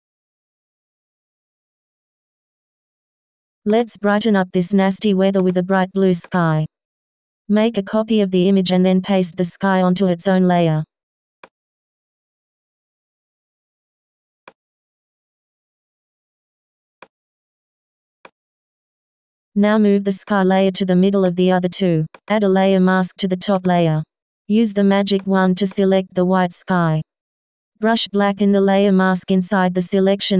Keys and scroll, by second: 18.9 Return, 22.9 w, 24.5 b.